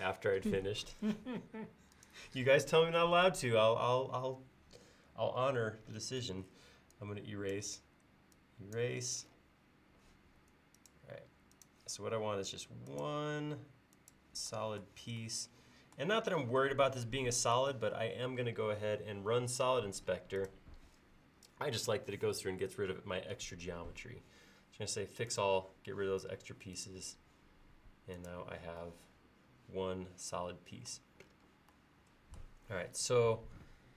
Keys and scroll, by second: 6.2 e.